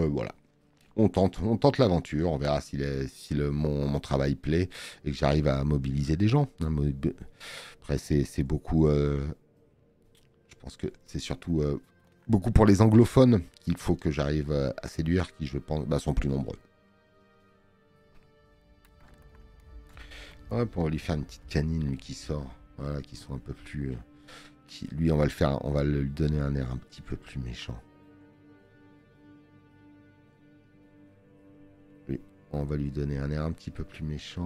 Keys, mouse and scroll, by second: 15.2 space, 15.3 click, 24.4 click.